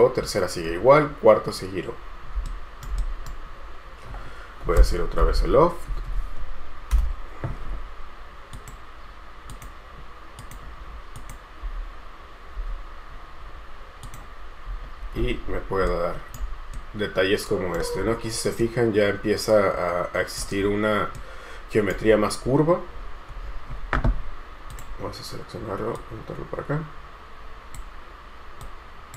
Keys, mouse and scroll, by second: 2.7 shift+right click, 3.2 right click, 5.1-6.8 typing, 7.1 Return, 11.8 space, 12.8 space, 14.9 scroll up 1, 16.0 scroll down 1, 16.0 shift+right click, 18.1-18.8 scroll up 1, 18.8 right click, 20.8-21.3 scroll down 1, 21.3 right click, 22.2-23.2 scroll up 1, 25.8-29.1 scroll down 1.